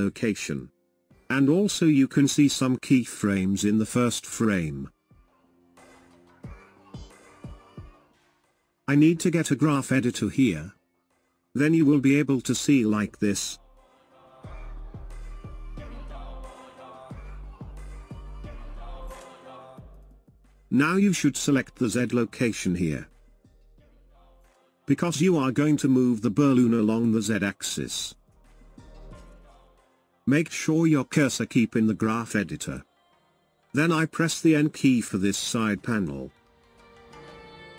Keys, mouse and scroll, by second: 9.6-12.7 drag, 19.5 click, 21.2 click, 22.2 click, 23.0 click, 24.0 click, 35.6 n.